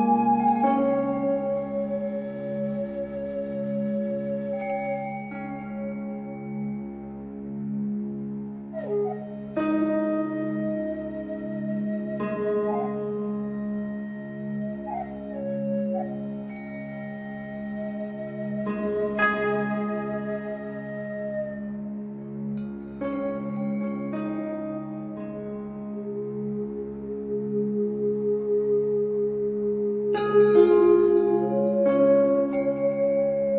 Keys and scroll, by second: 29.9 q.